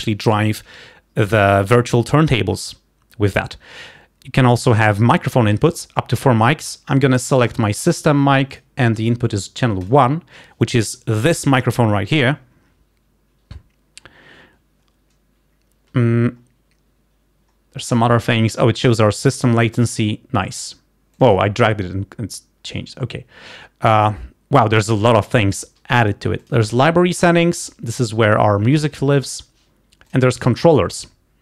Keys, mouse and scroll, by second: 6.2 click, 9.9 click, 13.9 scroll down 2, 16.5-17.3 scroll down 2, 19.7 click, 21.2 click, 22.7-23.4 scroll up 2, 26.5 click, 30.4-31.4 drag.